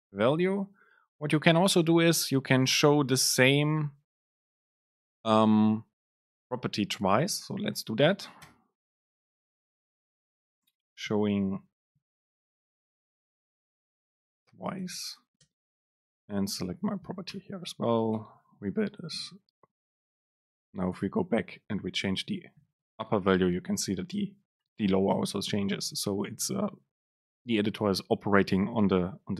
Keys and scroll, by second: 8.7 Return, 10.2 BackSpace, 15.1 Return, 15.6 super+space, 18.3 ctrl+shift+super+F9.